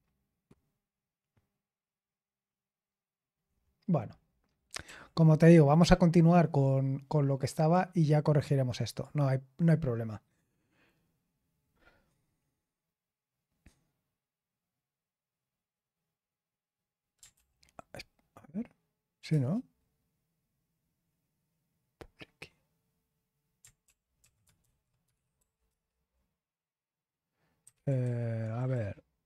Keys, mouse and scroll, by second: 4.8 super+l, 7.5 click, 17.3 ctrl+p, 19.3 Return, 23.8 ctrl+p, 24.2 ctrl+a, 24.5 alt+f, 24.8-25.8 typing, 27.3-28.5 typing.